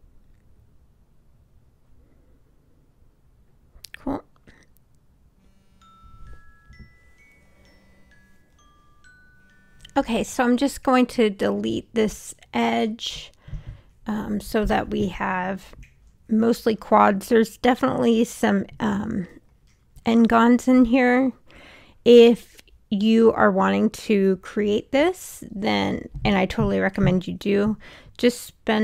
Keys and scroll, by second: 0.7 Return, 23.4 w.